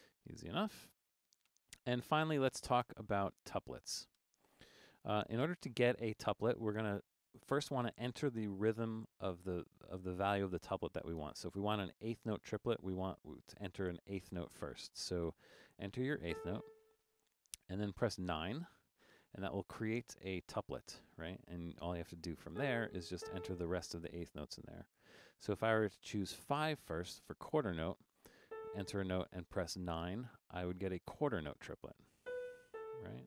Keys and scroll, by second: 0.0-1.5 typing, 2.9 Down, 3.1 Down, 3.2 Down, 3.3 Down, 4.2 4, 16.3 a, 18.6 9, 22.6-23.7 typing, 26.6 5, 28.5 a, 30.1 9, 32.0-33.2 typing.